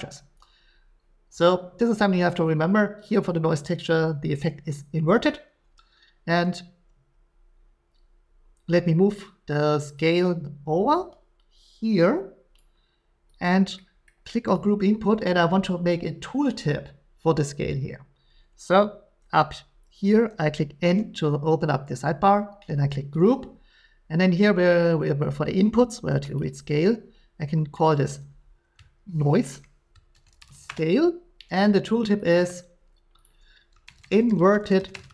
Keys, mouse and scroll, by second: 12.7 click, 13.4 click, 14.1-14.5 scroll, 14.5 click, 20.8 n, 23.2 click, 26.4 click, 27.8 click, 29.5-30.5 typing, 32.3 click, 33.2 click, 33.8-35.1 typing.